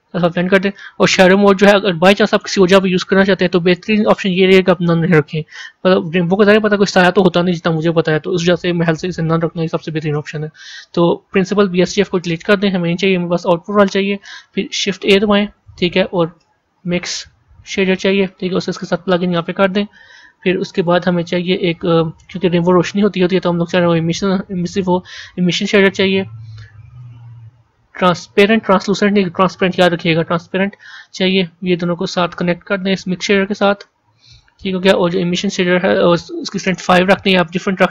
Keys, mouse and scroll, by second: 0.4-2.4 drag, 4.8-6.9 drag, 11.8 click, 12.8 Delete, 19.3 click, 36.6-37.9 drag.